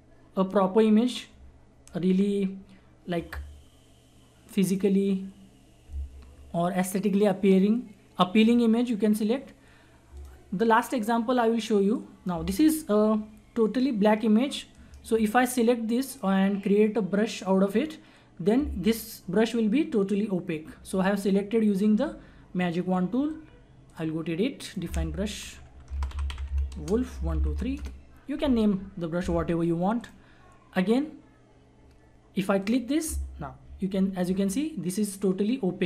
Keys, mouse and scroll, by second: 4.6 click, 8.4-14.7 drag, 14.7 right click, 15.3 click, 23.8 click, 25.4 click, 25.7-28.0 typing, 30.0 click, 32.6 click, 33.9 ctrl+=.